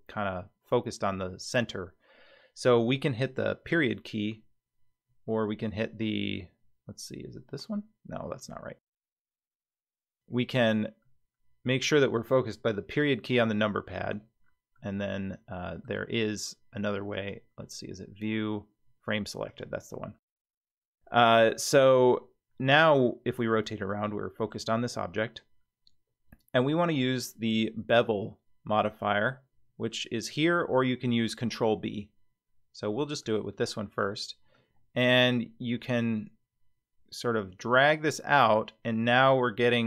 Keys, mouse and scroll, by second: 9.8-10.5 scroll down 2, 11.0-12.1 middle drag, 12.8 KP_Decimal, 14.1-14.5 scroll down 3, 14.7 click, 14.9 middle click, 17.1-19.6 drag, 20.3 scroll down 4, 20.9 middle click, 21.5-21.9 scroll down 2, 21.9-24.5 middle drag, 24.7 scroll up 2, 33.2 click, 34.5-39.8 drag.